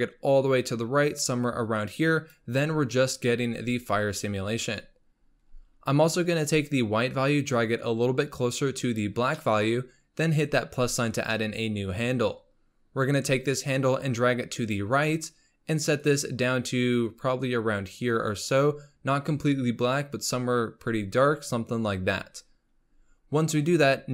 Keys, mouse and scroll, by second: 5.2-6.6 scroll up 7, 6.6-9.4 drag, 9.4-10.6 middle drag, 10.6-11.3 drag, 11.3-13.5 middle drag, 13.5-16.1 drag, 22.9-23.2 scroll up 3.